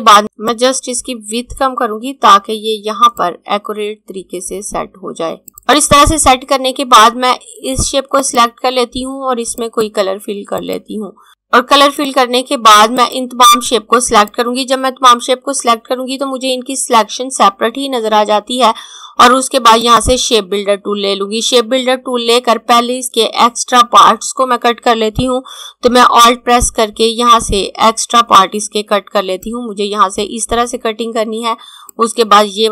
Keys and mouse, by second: 0.2 click, 8.2 click, 19.5 click, 25.5 click, 27.7 alt+click, 31.2 alt+click.